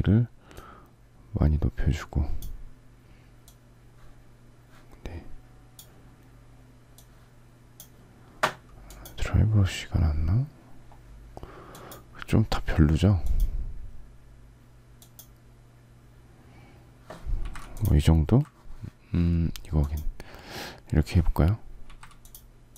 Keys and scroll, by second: 21.8 z.